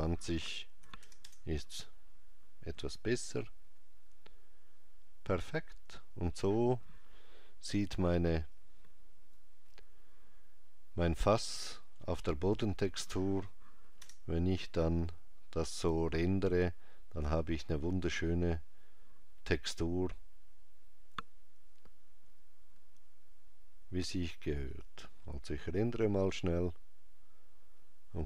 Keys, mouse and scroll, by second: 8.4 click, 14.0 KP_0, 22.8-23.2 scroll up 3, 24.5 click, 24.5 scroll up 5.